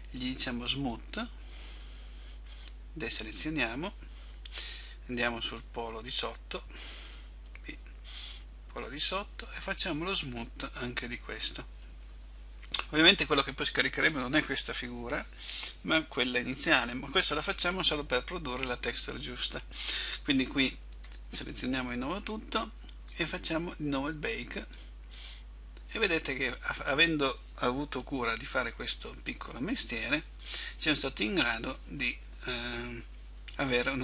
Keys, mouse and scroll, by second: 1.0 click, 3.4 a, 4.6 middle click, 5.5-7.3 scroll down 1, 7.3-7.7 scroll down 1, 9.0 b, 10.9 click, 21.2 a, 21.4 a, 25.4 click.